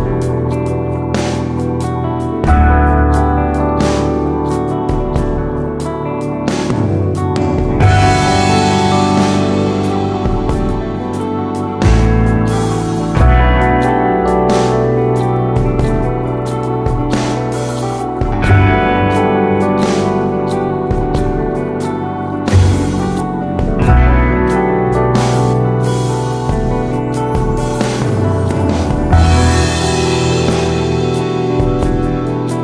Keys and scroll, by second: 0.1-1.3 typing, 12.5-13.2 typing, 18.2 super+c, 18.3 super+v, 22.6 super+c, 26.0 super+v, 32.0 super+v.